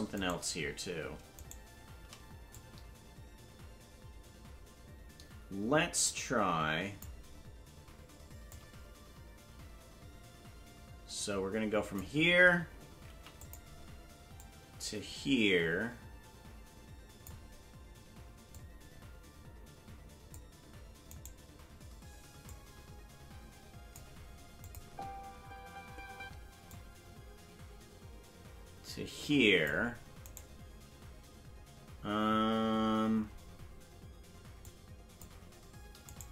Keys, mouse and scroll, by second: 0.4-1.1 right drag, 1.6 shift+right click, 2.5-7.0 drag, 8.5-12.0 drag, 13.1 i, 14.4-17.3 drag, 18.5-20.3 drag, 21.2-22.5 right drag, 22.5-24.0 drag, 24.6 click, 24.8 space, 26.7-29.7 drag, 26.7 space, 30.5 right click, 34.6 click, 36.2 right click.